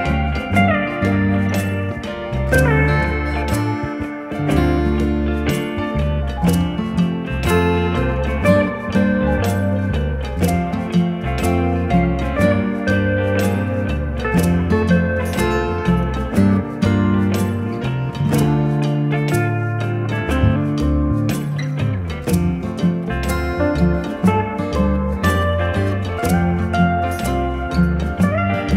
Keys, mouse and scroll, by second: 1.4 click, 10.9 click, 14.5 click, 16.0 right click, 18.4 click, 22.3 click, 25.7 ctrl+t, 26.9 shift+click.